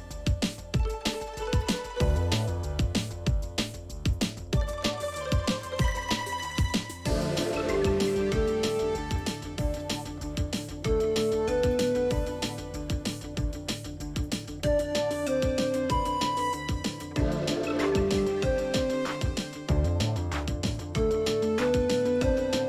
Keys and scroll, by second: 4.7 ctrl+c, 13.4-14.5 typing, 18.0 shift+Down, 18.2 shift+Down, 18.3 shift+Down, 18.8 shift+Left, 21.5 Down, 21.6 Down, 22.1 shift+Down.